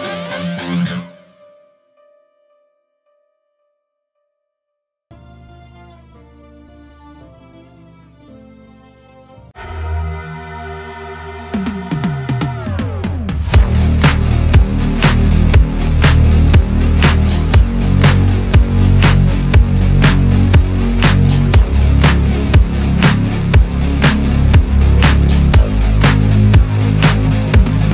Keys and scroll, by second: 25.3 Delete.